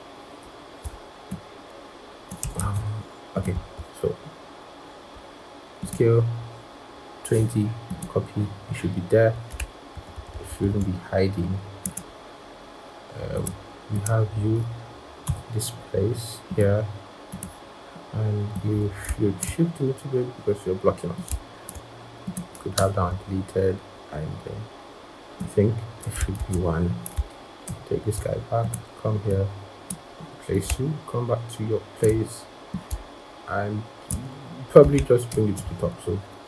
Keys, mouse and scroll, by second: 0.3 ctrl+], 2.5 ctrl+z, 3.4 right click, 9.8 shift+Right, 10.0 shift+Right, 10.3 shift+Right, 10.7 shift+Right, 15.1 i, 18.9 i, 21.4 typing, 22.6 i, 22.6 BackSpace, 26.2 ctrl+z, 27.5 ctrl+[, 35.1 ctrl+shift+].